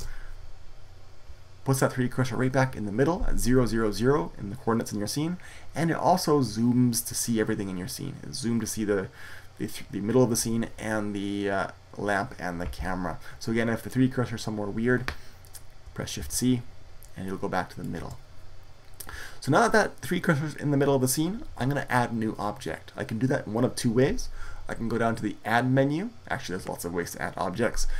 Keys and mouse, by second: 13.6-15.6 middle drag, 16.0 shift+c, 17.1-19.2 middle drag.